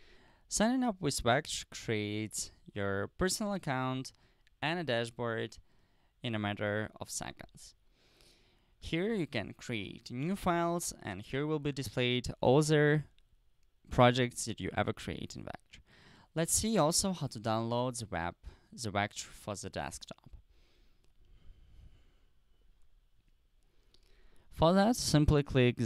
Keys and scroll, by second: 17.6 BackSpace, 17.8 BackSpace, 19.1 Return.